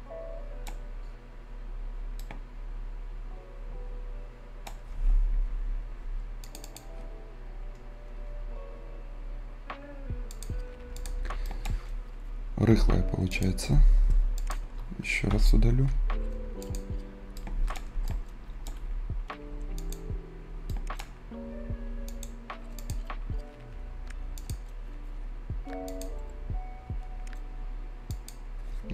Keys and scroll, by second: 12.6 Delete, 15.2 Delete.